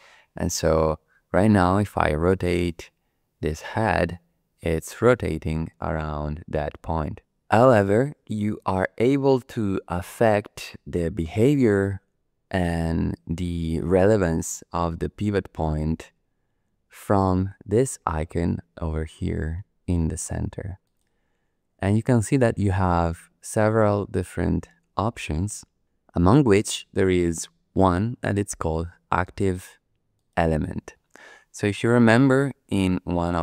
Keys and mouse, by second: 2.4 r, 20.8-30.3 drag.